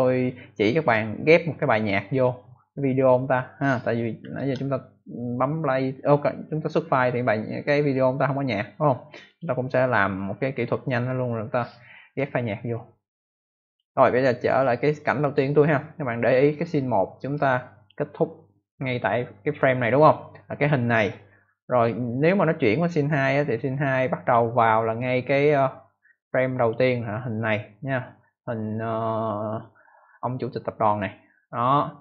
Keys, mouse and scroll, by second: 4.3 ctrl+Return, 9.2 click, 12.7 click, 14.4 click, 14.5 click, 15.2 click, 16.1 click, 17.3 click, 18.3 click, 21.6 click, 23.0 click, 24.1 click, 25.8 click.